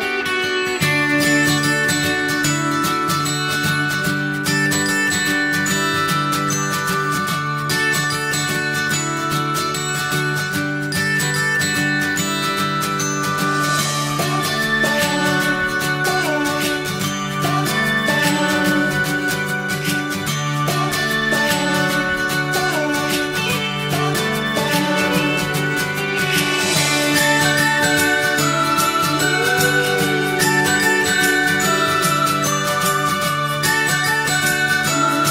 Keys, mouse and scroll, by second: 3.4 scroll down 1, 3.6 click, 3.9 scroll down 1, 4.1-5.5 middle drag, 5.5 click, 5.8-6.9 middle drag, 6.9 ctrl+a, 8.7 middle click, 9.3 click, 9.6 middle click, 10.3 ctrl+a, 16.1 middle click, 16.8 click, 17.1 middle click, 17.8 ctrl+a, 19.9 click, 20.2 middle click, 21.2 ctrl+a, 24.3-25.4 middle drag, 25.4 click, 25.7 scroll up 1, 25.8 middle click, 26.6 ctrl+a, 28.4 middle click, 28.9 Tab, 29.1 click, 29.3 middle click, 30.0 alt+z, 30.3 middle click, 30.9 ctrl+s, 31.6 click, 31.8 middle click, 32.7 ctrl+s, 32.8-33.2 scroll down 1, 33.2 middle click, 33.9 shift+a.